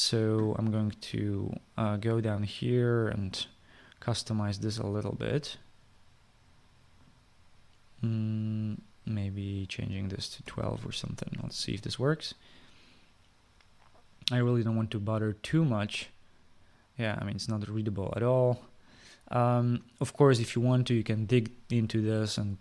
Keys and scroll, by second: 11.1 2.